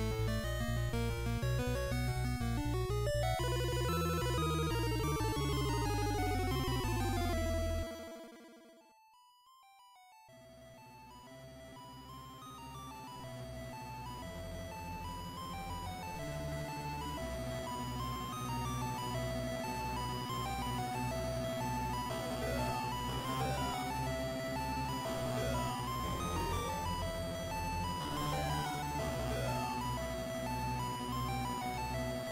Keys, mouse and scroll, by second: 2.2 click, 4.2-6.1 scroll up 1, 7.4 s, 9.8 click, 9.8-10.4 scroll up 1, 10.4-11.0 scroll up 2, 11.8 a, 13.4 b, 17.4 shift+right click, 18.4 shift+right click, 21.6 ctrl+z, 24.0 a, 25.6 l, 27.6 click, 29.6 a, 30.4 b.